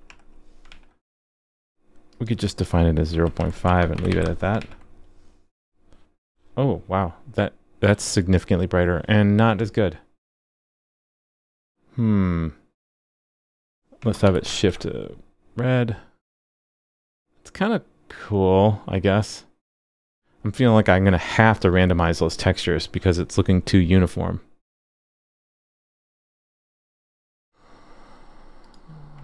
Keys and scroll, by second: 0.7 super+s, 4.6 super+s, 14.5 super+s.